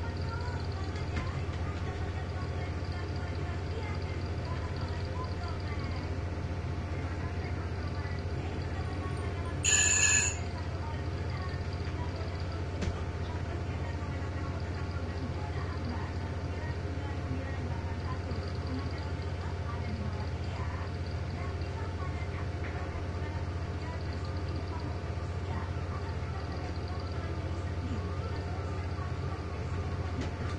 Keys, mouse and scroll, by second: 1.2 shift+Left, 1.6 shift+Right, 3.3 click, 4.6 shift+Left, 6.2 click, 8.9 click, 10.8-12.1 drag, 12.5 9, 12.9 Return, 14.0 click, 15.2 click, 16.2 click, 18.5 click, 21.4 click, 22.3 click, 23.1 shift+click, 24.4 click, 27.6 click, 29.1 click, 30.3 ctrl+d.